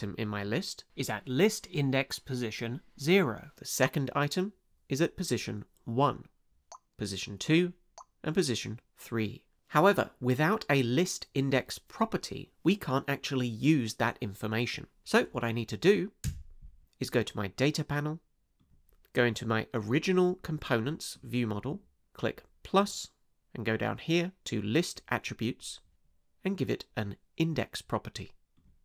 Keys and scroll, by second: 16.2 space.